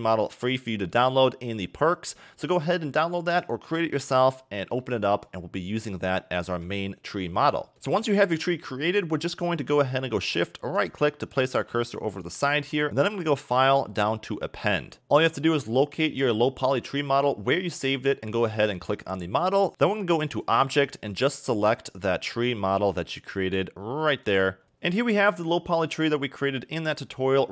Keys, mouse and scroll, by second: 4.8-7.7 middle drag, 7.7-8.8 scroll up 3, 10.7 shift+right click, 11.4 shift+right click, 12.1 shift+right click, 12.9-14.9 drag, 24.6 scroll up 2.